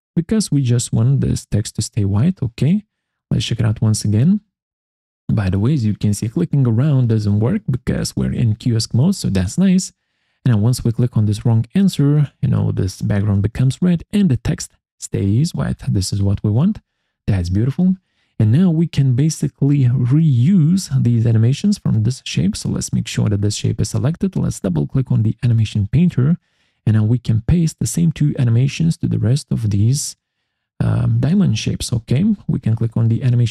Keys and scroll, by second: 16.3 Escape.